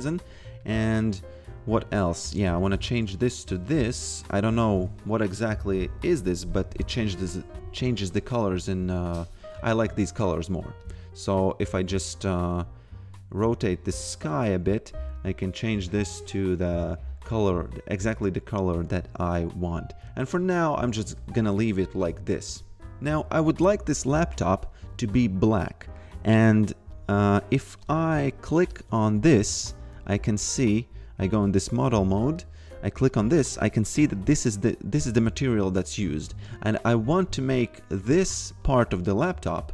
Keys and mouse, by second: 2.2 click, 8.3 click, 15.2 click, 21.2 click, 24.0 click, 27.8 click, 29.4 e, 29.9 v, 32.3 click, 36.9 click.